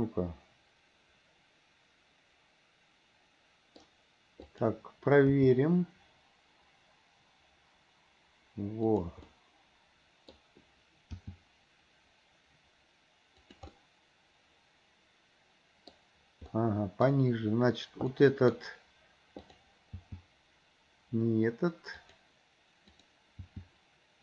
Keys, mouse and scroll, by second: 4.5 click, 5.4 g, 9.3-10.4 middle drag, 11.3 g, 13.8-16.0 middle drag, 16.0-16.6 scroll down 1, 16.6 scroll up 1, 16.8 middle click, 18.3 middle click, 18.5 scroll down 1, 19.5 click, 20.0 g, 23.0 click, 23.5 g.